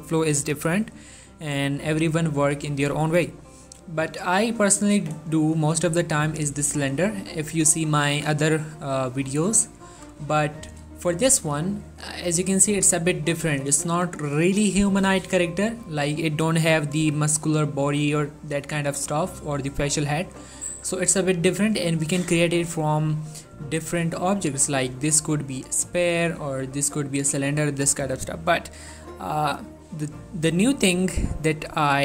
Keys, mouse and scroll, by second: 5.6 shift+Num_Lock, 5.9 shift+a, 10.3 shift+a, 12.2 middle click, 13.3 middle click, 13.7 1, 14.2-14.6 scroll up 1.